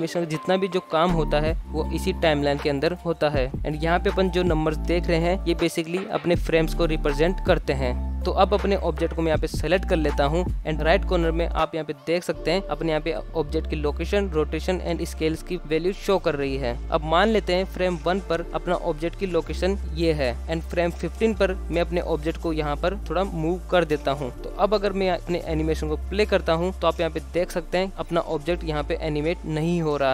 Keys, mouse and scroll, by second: 0.5 click, 8.5 click, 9.0 shift+scroll up 1, 9.2-9.8 shift+middle drag, 16.8 click, 17.6 click, 18.9 scroll up 2, 19.2 middle click, 19.9-20.5 scroll up 1, 20.9 click, 21.9 g, 23.6-24.3 shift+middle drag, 25.7 click, 26.3 space, 29.6 space.